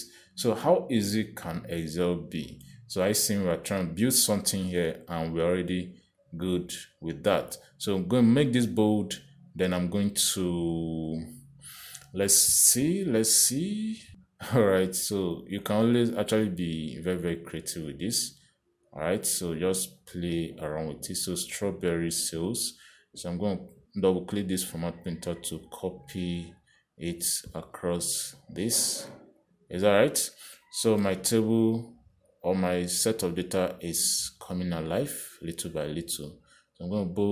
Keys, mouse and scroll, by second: 3.7 Escape, 7.4 click, 8.8 click, 11.7 click, 12.4 click, 13.2 click, 15.8 click, 17.1 click, 19.2 click, 21.8 click, 23.9 click, 24.9 click, 27.5 click, 28.8 click, 29.9 click, 30.7 click, 32.1 Escape, 32.9 click, 34.9 click.